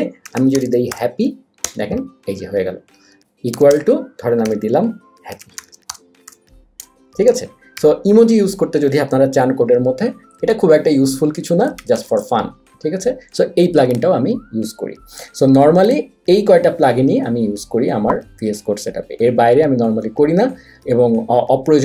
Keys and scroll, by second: 0.0-1.4 typing, 1.6 Return, 3.5-7.7 typing, 9.4 super+z.